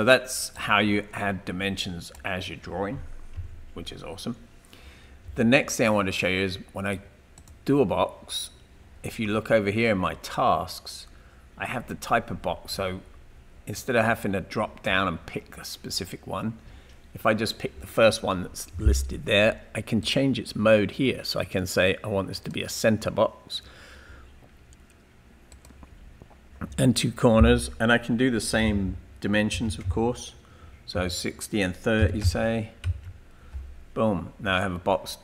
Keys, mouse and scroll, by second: 0.5 click, 3.5 Delete, 29.6 typing, 30.9 Tab, 31.8-33.5 typing.